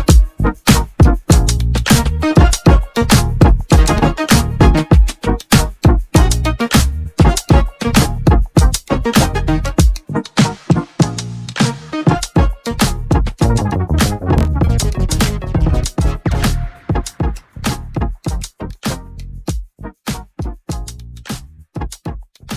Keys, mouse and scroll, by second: 4.9 middle click, 5.4-6.1 scroll down 3, 6.8 scroll down 1, 7.3-7.7 scroll down 3, 7.7 shift+middle click, 8.4 click, 9.4-12.5 shift+middle drag, 13.6-14.2 scroll up 5, 14.2-16.3 shift+middle drag, 16.3 shift+a.